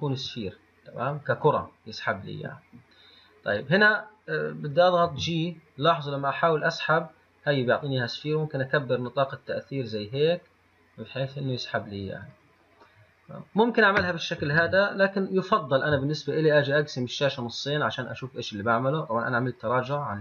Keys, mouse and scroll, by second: 5.3 g, 13.1-14.8 middle drag, 14.8 ctrl+z, 17.3-20.2 drag.